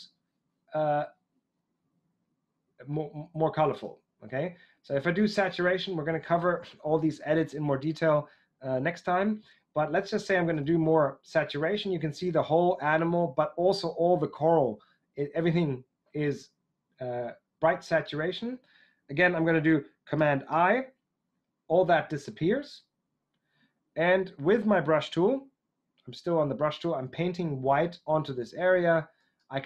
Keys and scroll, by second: 20.4 super+i.